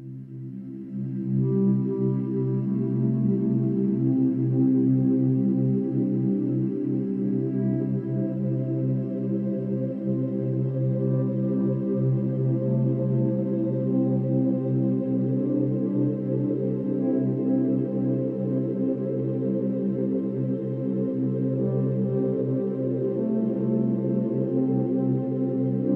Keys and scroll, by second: 1.0 space, 14.4 ctrl+=, 14.7 space, 20.5 space, 22.7 ctrl+alt+shift+n, 22.8 ctrl+alt+g.